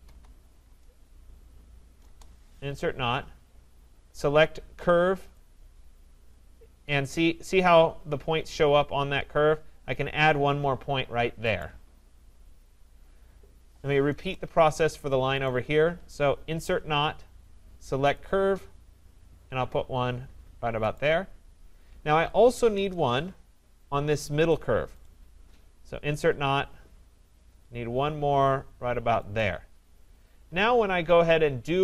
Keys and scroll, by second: 2.0 Return, 14.1 Return, 22.7 Return.